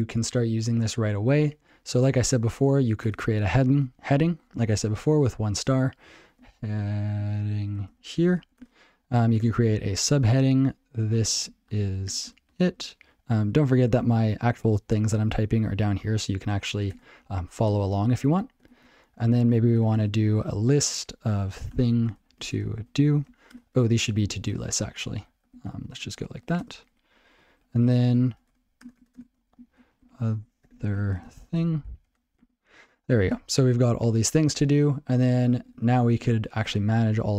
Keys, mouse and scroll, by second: 3.1 alt+Return, 6.1-9.3 typing, 10.7-12.8 typing, 17.0 alt+Return, 17.6 Tab, 18.1-23.4 typing, 23.5 alt+shift+Return, 24.1 ctrl+p, 24.3 ctrl+a, 24.4 ctrl+p, 24.6 ctrl+n, 25.1 ctrl+g, 25.4 ctrl+p, 25.6 ctrl+k, 25.8 ctrl+n, 25.9 ctrl+e, 26.1 ctrl+y, 26.4 ctrl+p, 26.4 ctrl+a, 26.6 ctrl+space, 26.7 ctrl+n, 26.8 ctrl+w, 27.3 ctrl+e, 27.6 ctrl+a, 28.0 ctrl+e, 28.5 alt+shift+Return, 28.8 alt+shift+Return, 29.0 alt+shift+Return, 29.7-32.5 typing, 33.2 alt+shift+., 35.4 ctrl+p, 35.5 ctrl+p, 35.7 ctrl+p, 35.9 ctrl+p, 36.1 ctrl+p, 36.5 ctrl+a, 36.6 ctrl+p, 36.7 ctrl+n, 36.9 ctrl+n, 37.1 ctrl+n, 37.3 ctrl+n.